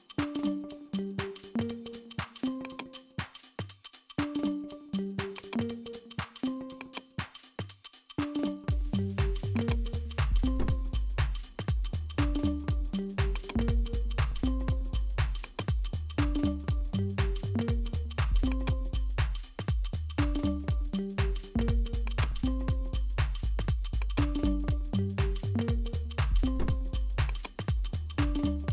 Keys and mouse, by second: 0.7 s, 5.3 shift+d, 6.9-9.3 drag, 9.6 click, 13.4-15.5 drag, 18.5-21.0 drag, 22.1 click, 24.0-26.4 drag, 27.3 click.